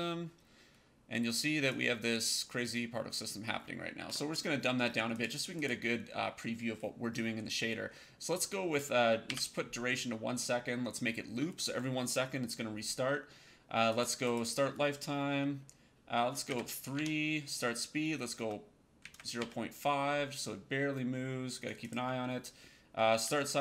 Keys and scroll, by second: 9.2 KP_1, 16.4 KP_3, 16.8 Tab, 18.3 KP_0, 19.3 KP_5.